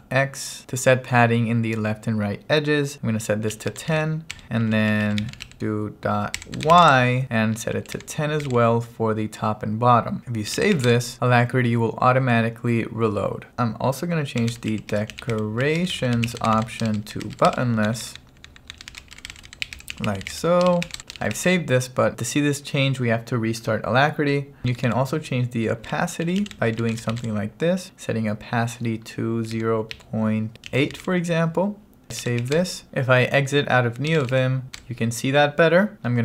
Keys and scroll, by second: 0.0-0.4 typing, 3.3-8.5 typing, 10.8 w, 10.9 Return, 13.5-21.9 typing, 24.6 BackSpace, 25.7-27.7 typing, 29.6-34.8 typing, 35.9-36.2 typing.